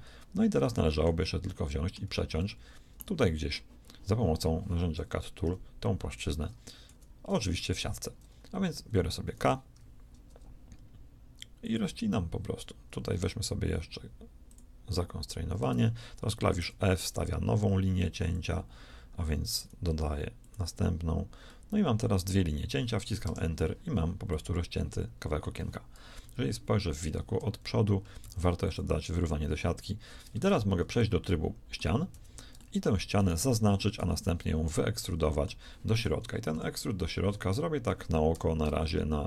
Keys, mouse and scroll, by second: 2.0 z, 5.3 KP_1, 6.8 z, 9.6 k, 21.4-25.0 middle drag, 26.1 KP_1, 28.1 shift+s, 30.2 ctrl+Tab, 32.0 z, 33.9 z, 36.0 KP_1, 36.4 KP_3, 38.2 e.